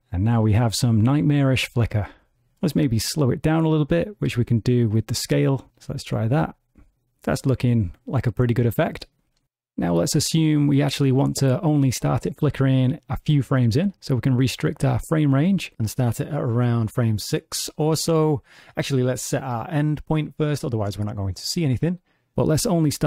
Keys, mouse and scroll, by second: 2.4 space, 3.4 click, 5.8 space, 10.0 middle click, 14.3 click, 14.9-16.2 scroll down 5, 16.2 click, 16.2-17.4 scroll down 1, 18.5 click, 22.3 middle click, 22.6 click.